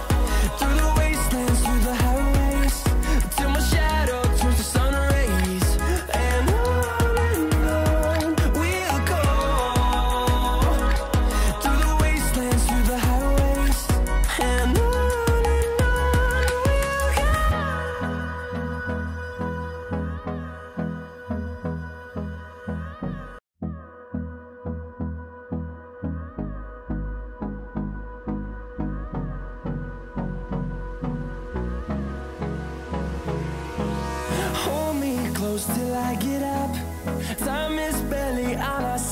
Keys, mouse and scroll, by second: 11.8 right click, 12.7 click, 15.8-16.3 scroll up 1, 16.3-23.3 drag, 23.3 ctrl+right click, 23.6 typing, 25.3 ctrl+d, 28.5 scroll down 1, 29.8 click, 33.7 typing, 35.0-37.5 drag, 35.0 typing, 37.5 ctrl+z, 38.8 click, 38.9-39.1 drag.